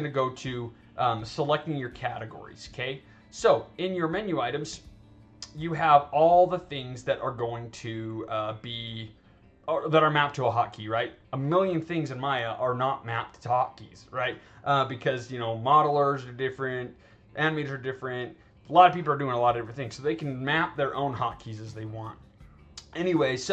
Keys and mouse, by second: 0.0 click, 5.2 click, 8.9-10.6 drag, 23.2 click.